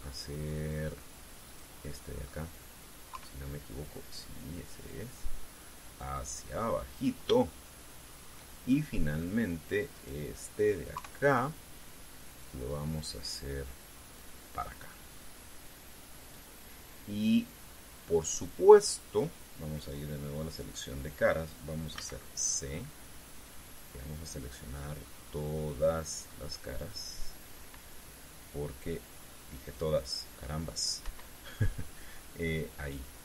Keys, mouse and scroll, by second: 1.1 middle click, 2.2 right click, 2.6 middle click, 3.9 KP_3, 5.6-7.9 drag, 8.1-9.3 shift+middle drag, 9.5 shift+middle click, 10.7 right click, 11.7 KP_3, 13.1-15.1 drag, 15.9-17.3 drag, 18.2 scroll down 2, 21.5 click, 22.7 c, 23.5-28.5 drag, 30.1 click, 31.7 Escape, 32.3-33.2 middle drag.